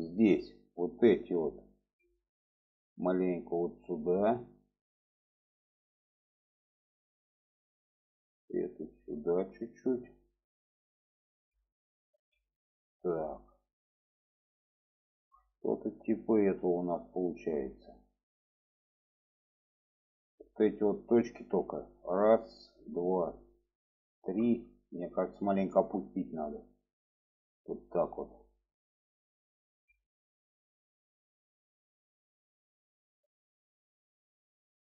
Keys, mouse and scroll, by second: 0.8 click, 1.9 alt+z, 2.4-7.0 drag, 7.3 click, 7.8 click, 8.5-9.8 drag, 11.3 alt+z, 11.7 click, 12.9-16.6 middle drag, 18.0-20.2 middle drag, 20.4-22.0 middle drag, 22.0 click, 22.9 shift+click, 24.2 shift+click, 24.5 middle click, 26.9 click, 28.7 alt+z, 30.0-31.5 middle drag, 31.7-34.8 middle drag.